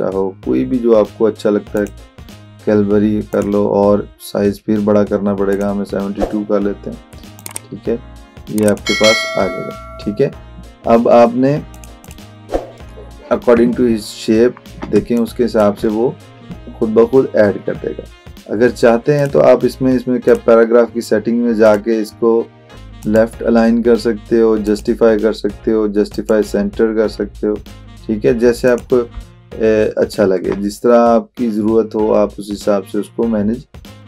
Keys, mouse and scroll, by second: 0.5 scroll down 1, 1.8 click, 5.5 click, 11.7 click, 14.2 alt+scroll up 1, 15.0 space, 15.2 click, 15.5 space, 17.1 scroll down 1, 19.2 click, 23.0 click, 28.7 click, 29.4-30.2 alt+scroll down 1.